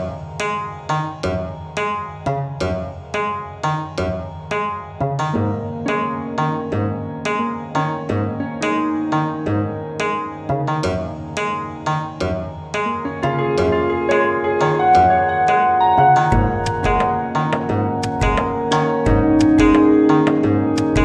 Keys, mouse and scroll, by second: 6.9 a, 11.4-13.2 drag, 17.6 g.